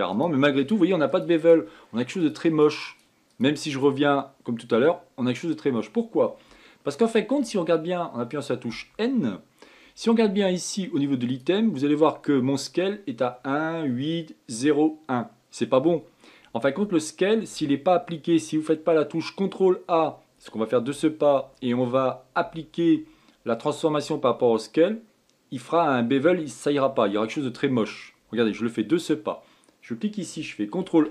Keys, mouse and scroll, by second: 6.5-7.2 scroll down 2, 7.2-9.4 shift+middle drag, 9.4 n, 12.0 click.